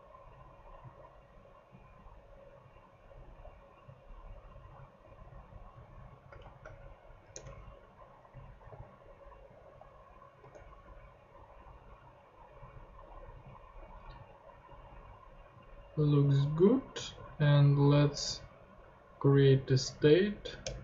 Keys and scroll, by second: 5.0 super+x, 6.4 shift+c, 7.3 shift+Return, 10.4 ;, 16.6 ctrl+Tab, 20.6 Return.